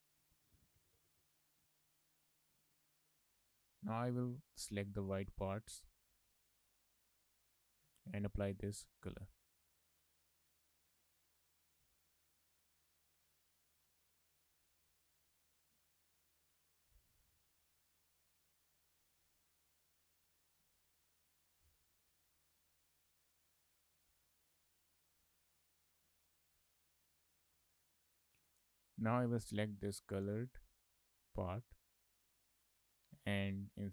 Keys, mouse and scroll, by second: 0.0 Left, 0.3 Left, 0.4 Left, 1.9 click, 4.9 click, 5.5 shift+click, 6.0 shift+click, 8.8 shift+click, 9.6 shift+click, 10.3 shift+click, 10.5 shift+click, 10.9 shift+click, 12.4 shift+click, 13.7 shift+click, 14.6 shift+click, 16.2 shift+click, 17.8 shift+click, 18.8 click, 20.1 click, 20.6 z, 21.6 click, 22.5 ctrl+z, 23.2 click, 24.1 click, 25.3 z, 26.1 z, 26.9 click, 27.4 click, 32.3 click.